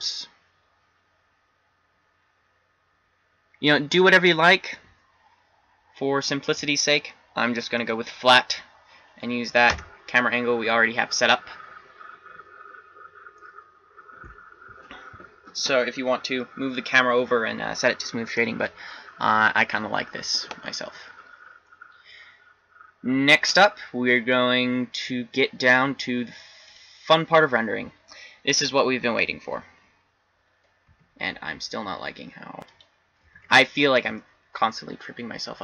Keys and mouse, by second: 8.1 click, 9.8 KP_0, 31.0 n, 33.6 n.